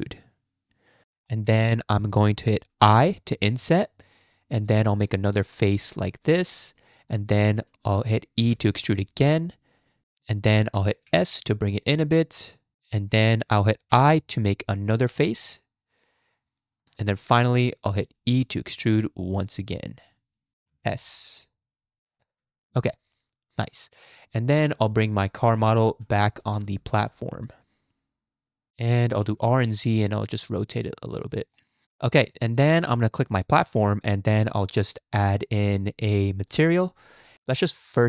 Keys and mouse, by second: 1.3 shift+click, 8.4 e, 11.1 s, 13.9 i, 17.3 click, 18.3 e, 20.7 s, 22.0 click, 22.4 Tab, 22.8-24.5 drag, 25.0 click, 25.5 middle drag, 26.0 g, 29.3 r, 31.7 middle click, 32.2 shift+middle click, 33.3 click, 36.5-36.8 drag, 37.6-38.0 drag.